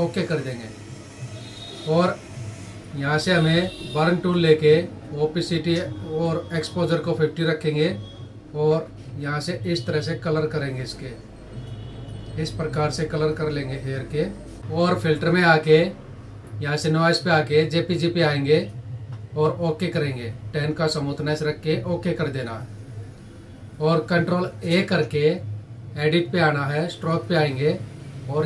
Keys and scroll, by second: 24.1 ctrl+a.